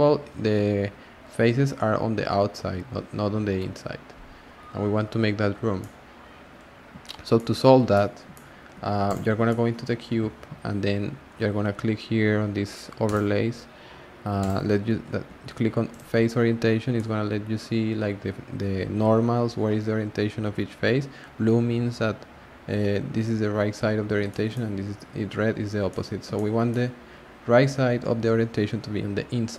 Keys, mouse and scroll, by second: 5.8-6.6 middle drag, 6.6-7.3 scroll down 2, 7.3-9.0 shift+middle drag, 9.0 click, 9.5-12.5 shift+middle drag, 13.0-16.9 drag, 16.9-20.0 middle drag, 24.3-29.5 shift+middle drag.